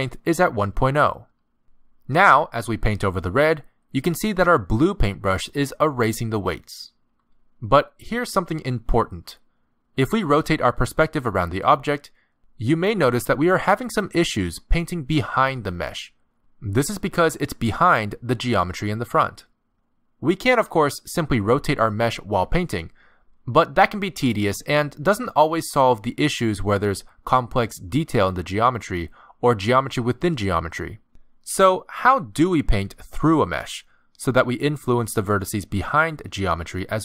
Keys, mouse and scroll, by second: 3.0 click, 6.9 click, 7.7 click, 10.9 middle click, 14.2 middle click, 16.8 middle click, 18.6 middle click, 23.0 middle click, 23.7 click, 24.5 middle click, 24.9 click, 25.7 middle click, 26.5 click, 27.6 middle click, 33.8 z, 36.9 click.